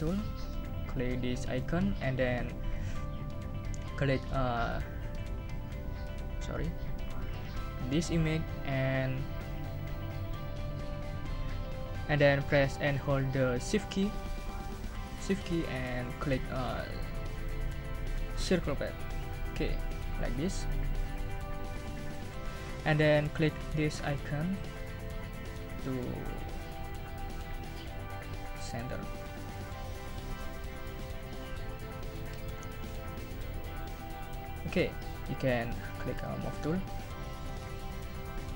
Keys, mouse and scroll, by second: 1.6 click, 4.3 click, 5.9 ctrl+scroll up 2, 6.5 ctrl+scroll up 2, 6.6-7.1 ctrl+scroll down 4, 8.0 click, 20.6 shift+click, 28.1 click, 29.8 click, 36.1 click.